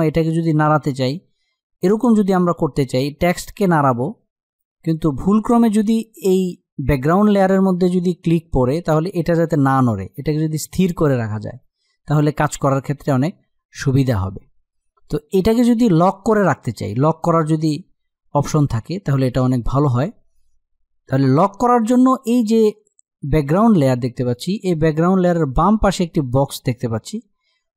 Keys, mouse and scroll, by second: 3.1-4.5 drag, 4.5 ctrl+z, 11.2 click.